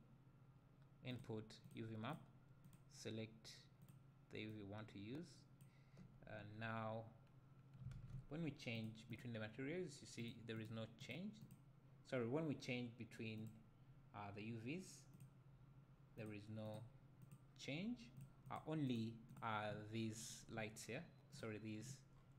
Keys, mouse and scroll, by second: 2.1 click, 4.5-8.9 drag, 9.1 click, 10.2 click, 10.6 click, 11.0 click, 11.4 click, 13.4 click, 16.2 click, 16.7 click, 17.2 click, 18.5 click, 18.9-19.3 drag, 21.3 click, 22.2 scroll down 1.